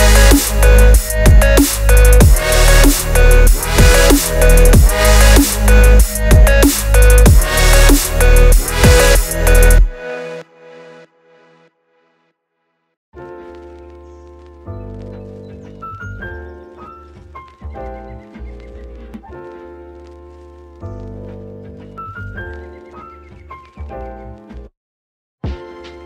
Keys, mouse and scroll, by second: 0.0-2.2 typing, 1.5 Tab, 1.7 click, 2.0 Tab, 3.7 Tab, 4.0 shift+click, 4.2 g, 5.5 click, 5.7 click, 6.0 shift+click, 6.1 Tab, 6.3 a, 6.4 s, 7.1 Tab, 7.2 click, 7.5 Tab, 7.7 click, 7.9 g, 8.7 Tab, 8.9 click, 9.9 click, 10.2-11.5 right drag, 11.6 a, 12.0 click, 12.5 a, 13.0 click, 13.2 Tab, 13.4 a, 13.6 s, 14.3 Tab, 15.9 scroll up 2, 16.2 Tab, 16.2 click, 16.7 shift+d, 17.0 p, 17.5 Tab, 17.8 scroll up 1, 18.1 click, 18.5 click, 18.9 click, 19.6 drag, 19.8 s, 21.0 Tab, 21.2 a, 21.3 e, 22.3 click, 22.9 Tab, 23.2 Tab, 23.6 s, 25.2 Tab, 25.4 a, 25.5 s.